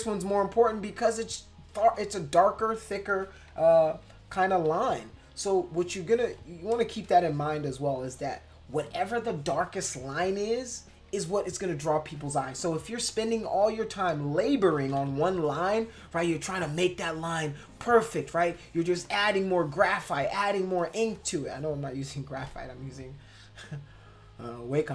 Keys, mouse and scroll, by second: 3.5 ctrl+-, 3.9 ctrl+-, 4.7 ctrl+=, 5.8 space, 6.1 click, 6.7 click, 7.3 click, 8.1 click, 8.7 click, 9.3 click, 9.8 click, 13.0 space, 13.1 click, 13.6 click, 14.8 [, 15.0 [, 15.6 click, 16.4 click, 17.0 click, 17.6 click, 18.1 click, 18.6 click, 19.1 click, 19.5 click, 20.0 click, 20.4 click, 20.8 click, 21.1 click, 21.5 click, 24.7 click.